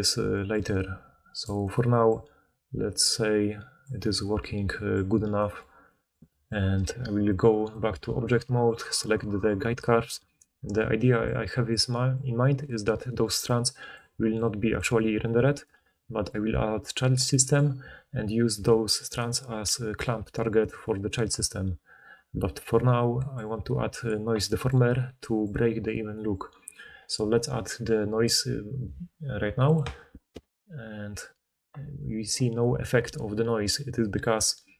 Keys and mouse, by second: 1.9-5.6 right drag, 5.6-17.4 drag, 9.0 right click, 13.2-15.1 d, 15.1-17.4 middle drag, 15.1-17.4 right drag, 15.6 d, 15.8 d, 18.5-19.4 d.